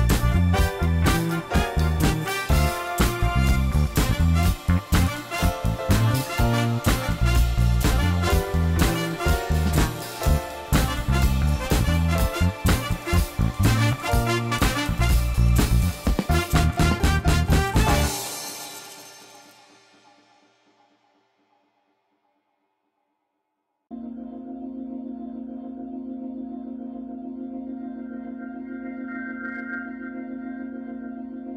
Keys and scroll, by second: 1.2 shift+z, 2.1 Tab, 3.3 q, 10.2 Tab, 17.7 e, 20.8 i, 23.4 e, 27.4 ctrl+r, 30.3 3.